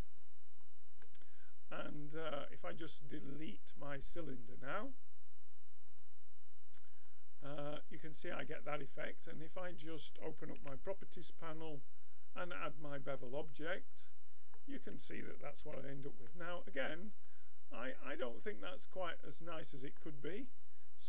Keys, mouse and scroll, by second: 1.0-3.6 middle drag, 3.9-6.6 drag, 7.0-8.9 drag, 8.9-10.0 middle drag, 10.6 n, 11.6-13.8 drag, 13.8-15.6 middle drag, 15.6 n, 16.3-18.1 middle drag, 19.1-21.0 middle drag.